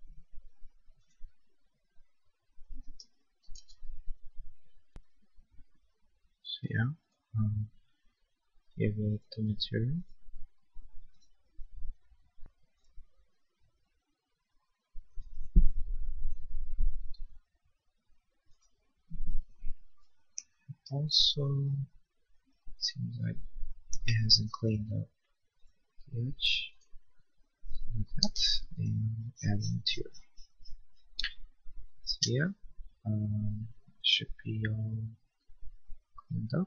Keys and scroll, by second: 3.5 ctrl+z, 6.6 b, 23.3 l, 28.1 b, 31.4 Escape.